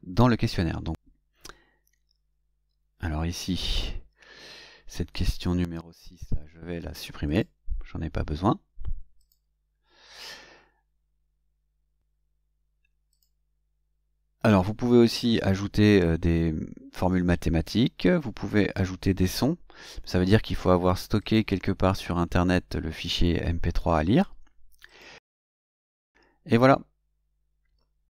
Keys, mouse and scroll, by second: 3.2 click, 5.1 click, 7.2 click, 9.1 click, 13.0 click, 21.1 click, 24.7 click.